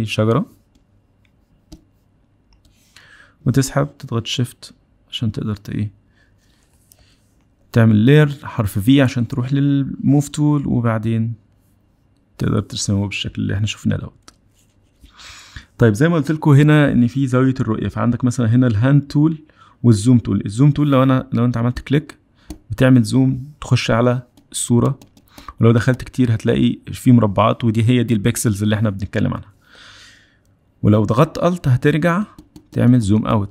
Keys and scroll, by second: 8.4 v.